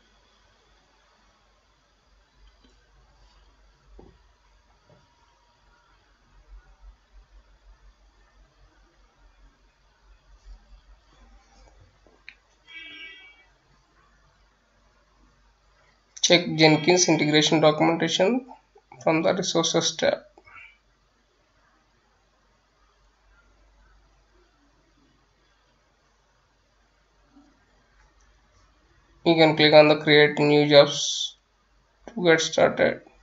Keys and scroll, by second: 5.7-14.6 typing, 18.5-24.2 typing, 24.4 Return, 25.9 F9.